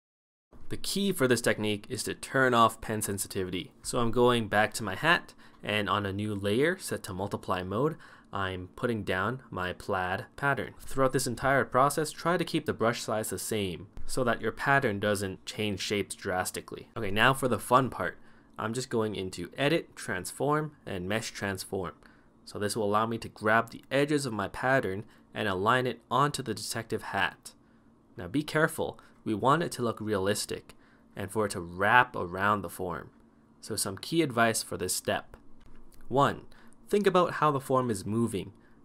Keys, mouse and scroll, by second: 5.2 [, 7.6 ctrl+z.